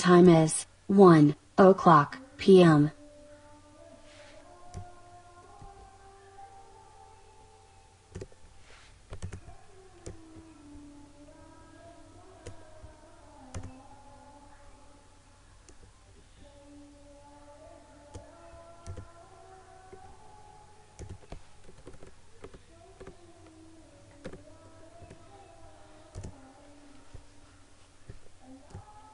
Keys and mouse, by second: 4.7-13.5 drag, 15.8-18.8 drag, 21.6 Right, 25.1 Up, 26.2 click, 28.8-29.1 drag.